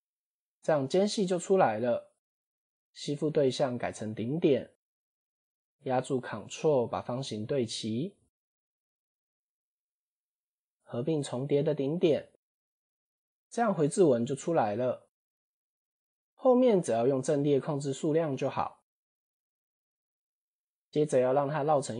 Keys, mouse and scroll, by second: 2.3-3.7 drag, 4.4 1, 4.9 scroll up 2, 6.1 g, 8.2 scroll down 1, 8.7 a, 10.0 m, 11.7-12.2 scroll down 2, 12.4 click, 13.1 Tab, 14.8 click, 15.0 click, 15.7-16.0 scroll down 6, 17.0 click, 17.1 click, 18.9 click, 19.3 x, 20.2 click.